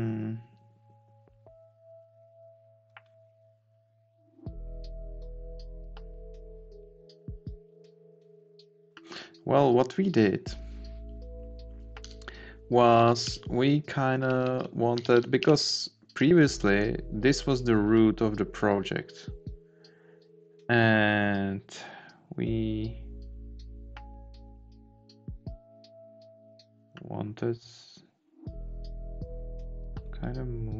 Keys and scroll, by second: 12.1 Left, 12.9 Down, 14.2 Up, 15.4 Right.